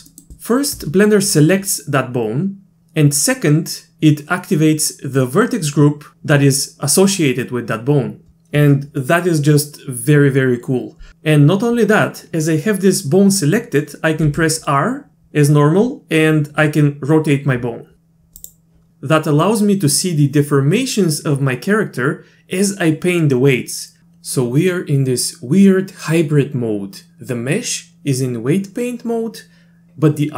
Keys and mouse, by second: 0.1 middle click, 0.2 click, 0.4 shift+click, 14.3 r.